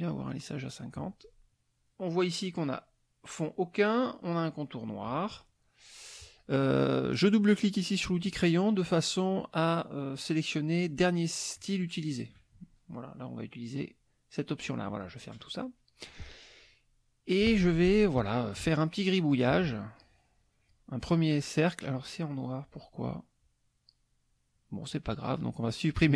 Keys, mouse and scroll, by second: 7.2 click, 11.5 click, 14.9 click, 15.6 middle click, 18.6-20.9 drag, 26.0 click.